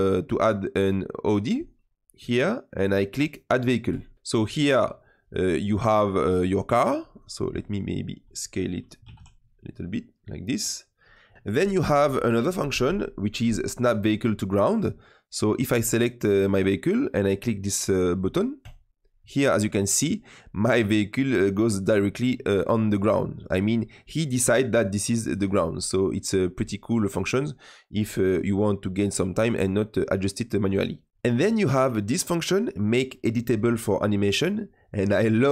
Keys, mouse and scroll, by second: 3.8 click, 4.1-6.8 middle drag, 7.0 click, 8.9 s, 10.5-11.2 scroll down 2, 11.2 click, 11.3-12.4 middle drag, 15.9 click, 18.5-19.1 drag, 19.1-24.6 middle drag, 24.6 click, 25.7-28.0 middle drag, 28.0-28.3 scroll down 2, 28.3-32.8 middle drag, 35.4 click.